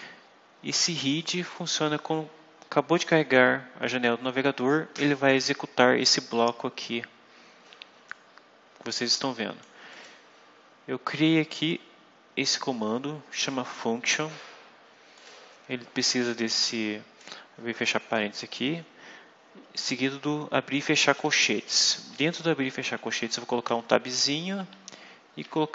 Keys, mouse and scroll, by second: 0.9 click, 8.0-9.7 drag, 9.8 click, 11.6-13.6 drag, 15.0 click, 16.1-17.3 drag, 19.5 Right, 21.0 Down, 21.7 Up, 22.6 Down, 23.1 Home, 23.6 Left, 24.0 Tab, 24.6 Delete.